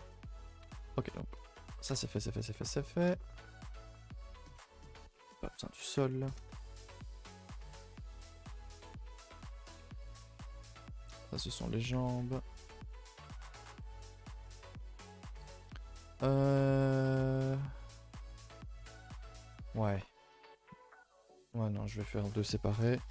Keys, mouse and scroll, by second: 0.0 Tab, 1.0 alt+h, 1.6 a, 1.7 a, 2.1-2.9 scroll down 3, 2.4 middle drag, 2.9-3.6 middle drag, 3.6 a, 3.7 a, 3.9-5.0 middle drag, 5.0 click, 5.6 h, 6.4 shift+middle drag, 6.7-7.2 scroll up 1, 7.2 click, 7.7-9.1 middle drag, 9.1 click, 9.8 a, 10.0 a, 10.7-11.6 middle drag, 11.6 a, 11.8 a, 14.2 click, 14.8-16.0 middle drag, 16.0-16.3 scroll up 1, 16.3 shift+middle click, 16.8 click, 17.1 click, 17.6-18.3 middle drag, 18.3 a, 18.5 a, 18.6-23.1 middle drag.